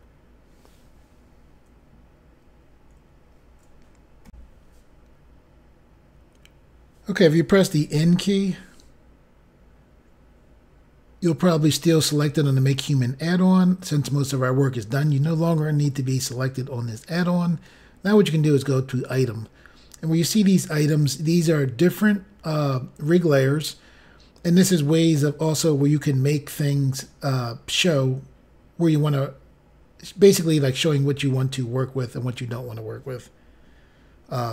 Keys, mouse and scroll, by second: 4.3 Insert, 7.8 n, 19.0 click.